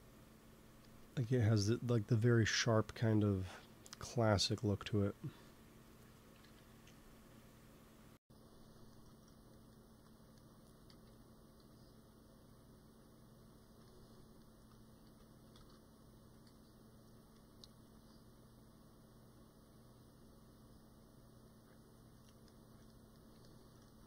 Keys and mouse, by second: 2.9-6.3 middle drag, 6.3 KP_3, 8.8 middle click, 10.6 g, 10.8 f, 11.5 f, 12.1-13.8 drag, 15.0 ctrl+z, 15.5 ctrl+shift+z, 17.9 ctrl+s, 22.5-24.0 middle drag.